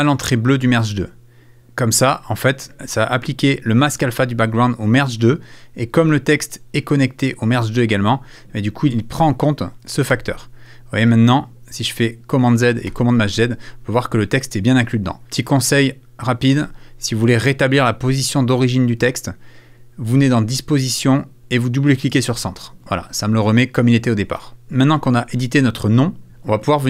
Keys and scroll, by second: 12.9 shift+super+z.